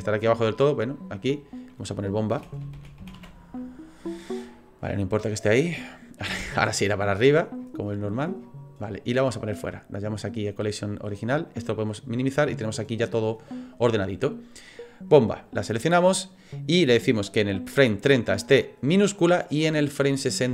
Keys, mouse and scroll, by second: 1.1 click, 1.1 scroll down 1, 1.3 click, 5.9-8.5 scroll up 62, 9.2 click, 9.2-11.6 scroll up 3, 11.7 click, 15.1 click, 17.1 click.